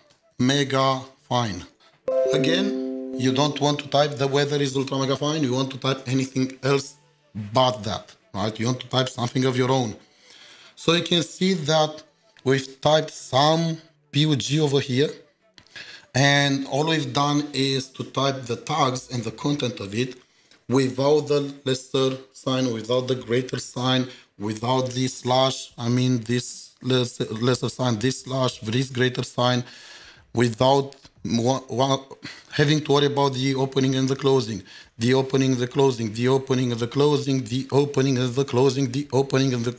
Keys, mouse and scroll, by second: 0.0-2.1 typing, 14.0 typing, 14.5 ctrl+shift+4, 35.4 ctrl+shift+4, 35.5 double click, 36.0 double click, 36.7 double click, 38.1 double click, 38.8 double click.